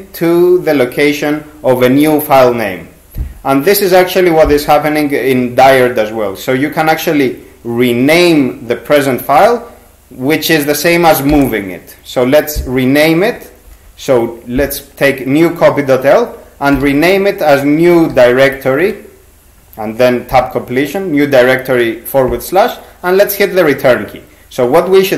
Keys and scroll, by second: 11.3 shift+r, 16.5-19.0 typing.